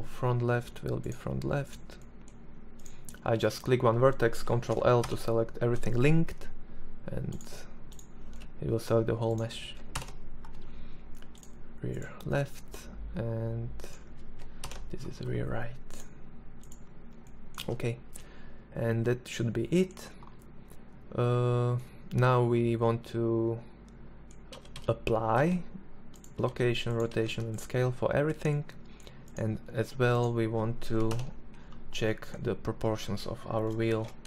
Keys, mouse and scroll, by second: 1.6 middle click, 3.9 ctrl+l, 8.8 ctrl+l, 12.7 right click, 13.4 ctrl+l, 16.4 Tab, 23.3 a, 23.5 a, 24.1 ctrl+a, 25.3 ctrl+a, 25.9 ctrl+a, 28.5 Tab, 29.9 ctrl+l, 32.7 shift+d.